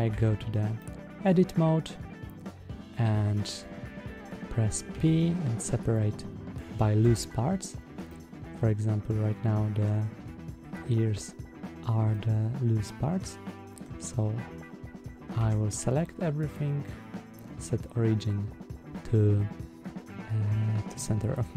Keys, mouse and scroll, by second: 0.0 Tab, 0.6-1.1 middle drag, 1.5 scroll up 1, 6.9 Tab, 7.9-9.7 middle drag, 10.5 click, 12.0-13.7 middle drag, 15.2 a, 16.3-21.2 drag.